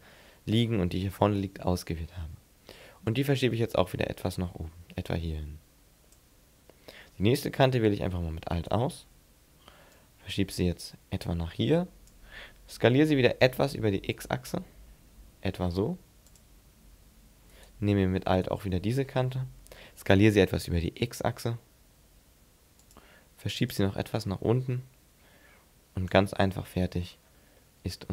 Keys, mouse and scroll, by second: 3.1 click, 8.5 alt+right click, 10.0 click, 13.4 s, 16.4 click, 17.5 right click, 18.3 alt+right click, 19.7 s, 23.0 click, 23.7 click, 26.5-27.0 scroll up 4, 27.0-27.5 scroll down 4, 27.5 middle click.